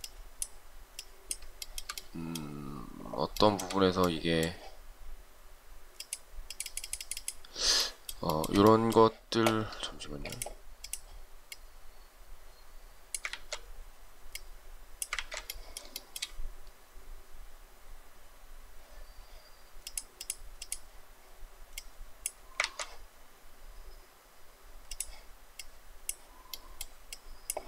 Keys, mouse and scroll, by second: 1.7 shift+middle click, 3.4 shift+middle click, 8.4 shift+middle click, 10.1 space, 15.3 ctrl+z, 16.1 shift+middle click.